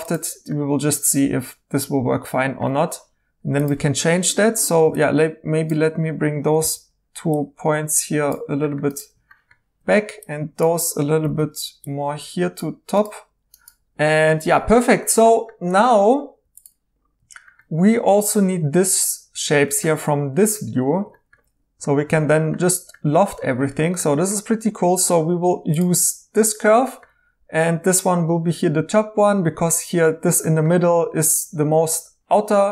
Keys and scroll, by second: 4.7 1, 6.6 g, 11.2 g, 16.4 2.